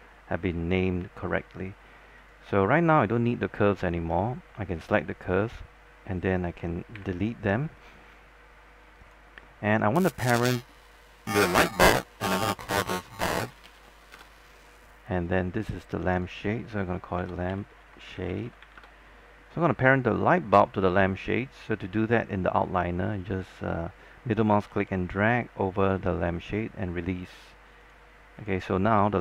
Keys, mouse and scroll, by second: 0.2-2.0 scroll down 1, 2.4 click, 3.1 ctrl+click, 3.9 ctrl+click, 7.2 Delete, 9.2 click, 13.3-14.4 typing, 15.4 click, 17.2-19.3 typing, 20.3 click, 24.9-27.3 middle drag, 28.0 click.